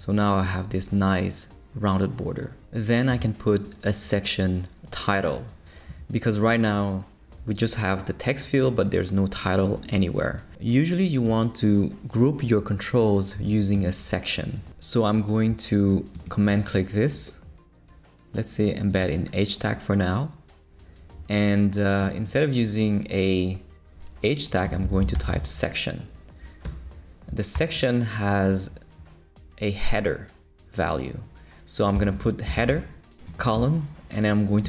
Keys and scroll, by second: 24.6-25.8 typing, 26.6 Escape, 27.3 shift+Escape, 27.5 shift+9, 31.7-34.6 typing.